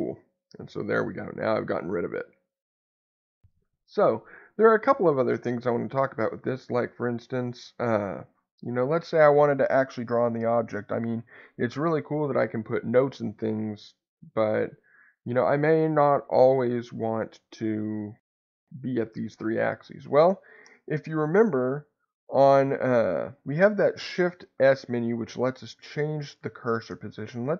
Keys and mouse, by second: 6.4-8.0 drag, 24.5 shift+s.